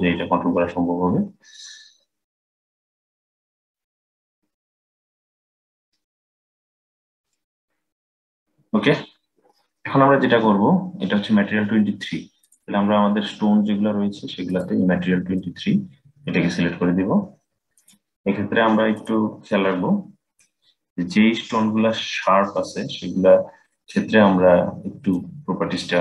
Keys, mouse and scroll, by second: 5.3-6.9 scroll down 3, 6.9 click, 8.8-11.9 scroll down 3, 12.1 click, 14.2-17.3 drag, 18.7 click, 20.3-21.3 scroll down 1, 21.3-24.2 scroll up 3, 24.8-26.0 drag.